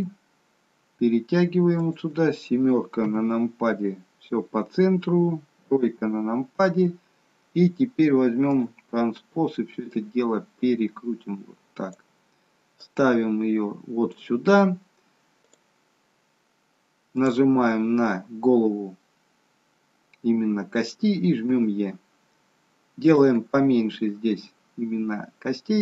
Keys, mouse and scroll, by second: 3.0 KP_7, 5.5 KP_3, 8.4 click, 9.8 click, 12.8 click, 15.4 click, 17.1 click, 21.3 e, 23.5 e.